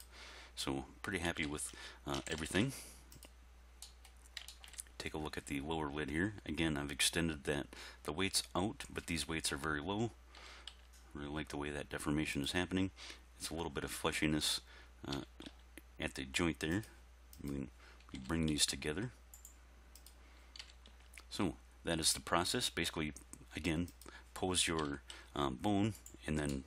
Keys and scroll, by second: 1.3 a, 2.2 alt+r, 2.3 alt+g, 2.5 alt+s, 10.4 r, 10.7 x, 14.0 x, 15.1 r, 15.5 x, 18.2 r, 18.5 x, 20.6 r, 20.9 x, 24.8 r, 25.1 x.